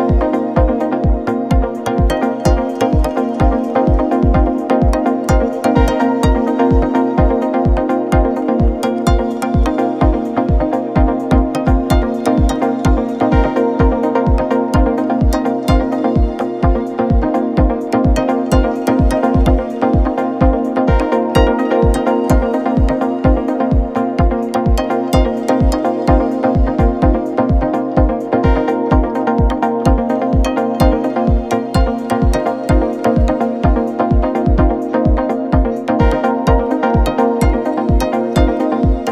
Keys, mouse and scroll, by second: 1.6 ctrl+g, 2.9 click, 4.1 shift+t, 6.1 Return, 7.2 click, 10.0 click, 12.8 click, 17.9-18.3 alt+drag, 19.8-20.3 shift+drag, 26.8 shift+click, 27.1 ctrl+t, 28.7-30.2 drag, 30.2-32.7 drag.